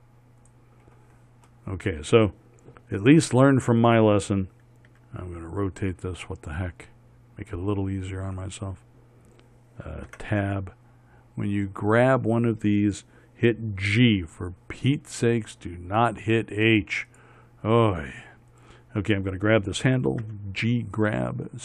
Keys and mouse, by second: 5.4 r, 10.6 Tab, 12.0-13.8 right drag, 14.4 g, 19.0-21.6 drag, 20.7 g.